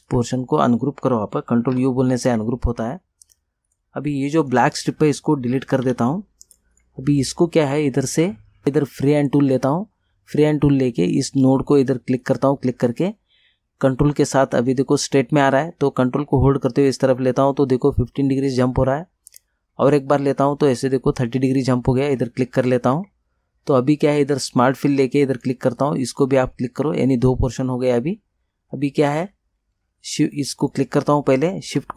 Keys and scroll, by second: 1.8 ctrl+u, 5.9 Delete.